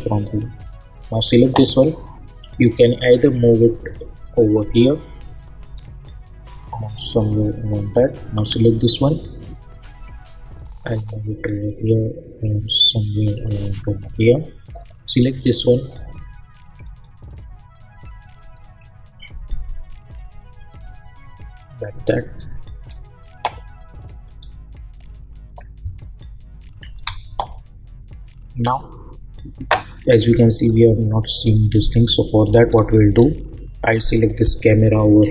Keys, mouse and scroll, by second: 25.8 space, 26.0 click, 26.3 space, 30.5-31.5 scroll down 1, 31.5-32.7 scroll up 1, 32.7-34.1 scroll down 1, 34.1 click, 34.6-35.3 scroll up 1.